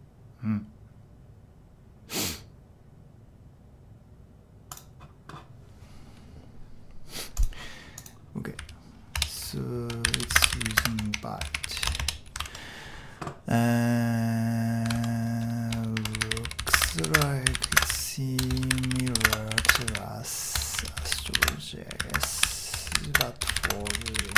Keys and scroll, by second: 8.6-12.3 typing, 14.9 super+Tab, 15.9-24.3 typing.